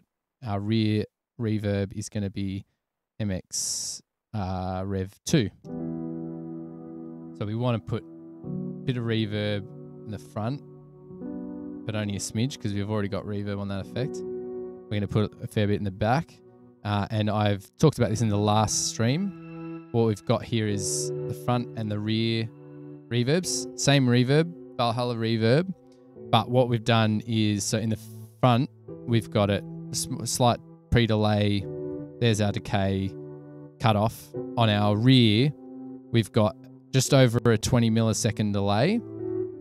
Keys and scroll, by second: 5.7 space.